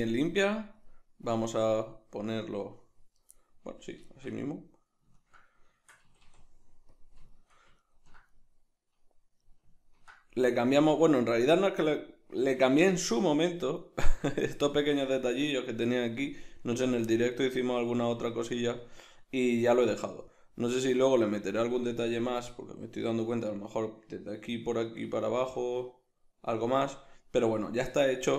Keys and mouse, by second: 1.3-3.4 drag, 3.4-23.2 middle drag, 6.1 a, 6.9 click, 26.8-28.3 middle drag.